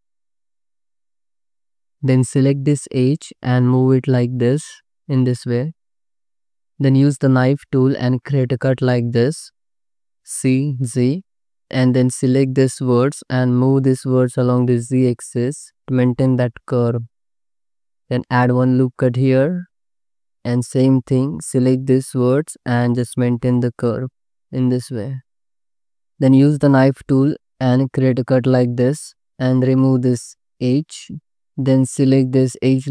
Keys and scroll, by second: 1.7 alt+z, 3.1 g, 6.1 ctrl+z, 6.4 1, 8.8 c, 9.0 z, 9.8 space, 11.6 c, 12.3 alt+z, 12.9 2, 16.4 alt+z, 18.0 ctrl+r, 20.1 alt+z, 23.2 ctrl+r, 25.3 alt+z, 25.9 1, 27.5 c, 28.3 space, 29.0 c, 29.3 2, 30.7 ctrl+x.